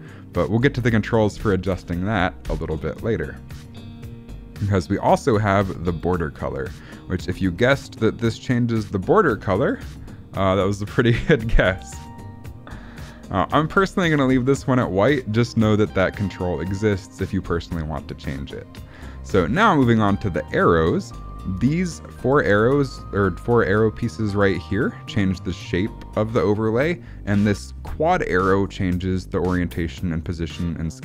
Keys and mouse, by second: 1.7 space, 2.4 shift+Left, 5.8 click, 14.2 ctrl+z.